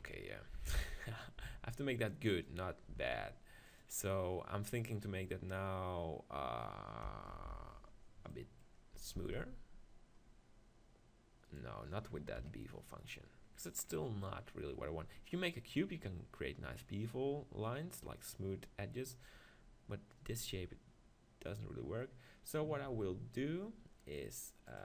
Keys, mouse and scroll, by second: 0.0 KP_1, 0.5 Tab, 1.4 s, 2.4-5.6 drag, 2.9 s, 7.3 ctrl+l, 8.3 middle click, 9.1 ctrl+b, 10.2 scroll up 1, 10.3 middle click, 11.6-12.8 drag, 12.4 KP_1, 12.8 right click, 15.2-16.0 scroll up 1, 16.0-17.8 middle drag, 17.8-18.7 scroll up 1, 18.7-22.8 scroll down 1, 22.9 Tab.